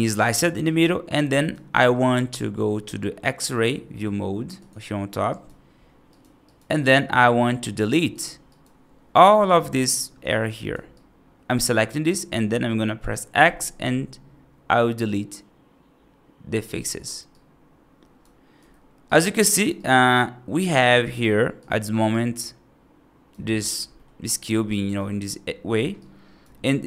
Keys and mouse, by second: 0.2 right click, 0.5 right click, 1.2 right click, 5.2 right click, 6.0 right click, 6.3 right click, 6.7 right click, 8.3 right click, 9.2-10.6 drag, 10.8 right click, 11.9 right click, 13.3 x, 17.2 right click, 18.4 F2, 18.9-19.5 right drag, 19.7 right drag, 21.5-21.9 drag, 22.0-23.2 right drag, 23.8 middle drag, 24.1 right drag, 24.6 right drag, 25.9 right click.